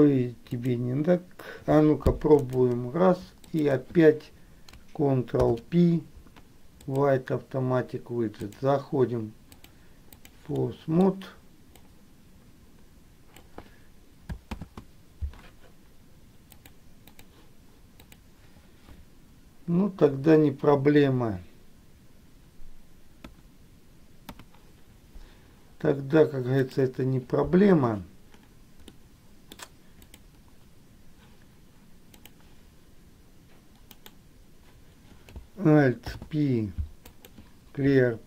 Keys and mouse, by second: 0.7 click, 2.6 shift+click, 3.6 shift+click, 5.6 ctrl+p, 8.6 click, 9.9 click, 10.7 middle click, 12.0-13.6 drag, 14.7 ctrl+z, 16.8 click, 18.1 click, 20.2 Delete, 24.4 Escape, 24.5 KP_1, 26.8-28.1 drag, 29.1 middle click, 32.4 click, 34.1 right click, 36.2 alt+p.